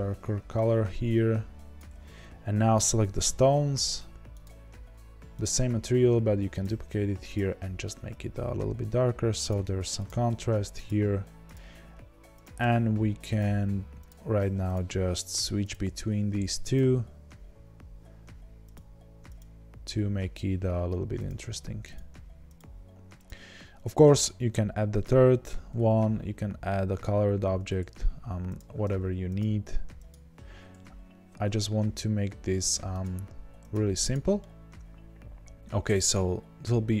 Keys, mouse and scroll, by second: 2.8 click, 5.4-7.5 drag, 11.5-12.4 drag, 13.6-28.5 drag, 30.1-34.1 drag, 34.3-37.0 middle drag.